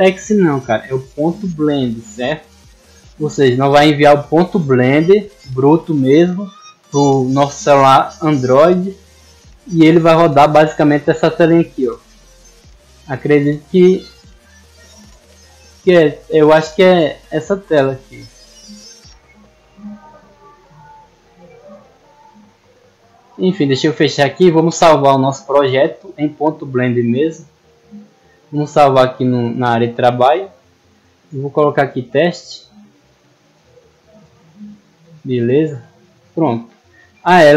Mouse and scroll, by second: 8.1 click, 10.8 click, 12.7 click, 13.4 click, 14.8 click, 15.7 click, 17.1 click, 18.6 click, 18.9 click, 19.5 click, 20.5 click, 21.0 click, 21.3 click, 21.5 click, 23.0 click, 26.5 click, 27.5 click, 29.7 click, 30.8 click, 34.1 click, 35.3 click.